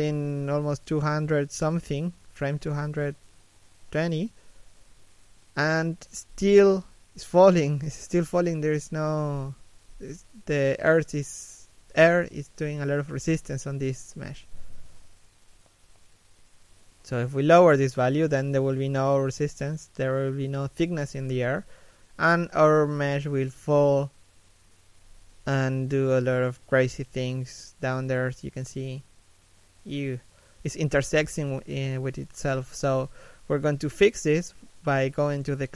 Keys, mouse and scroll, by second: 1.5 middle click, 8.5 middle click, 27.2-27.8 scroll up 1, 28.3 middle click.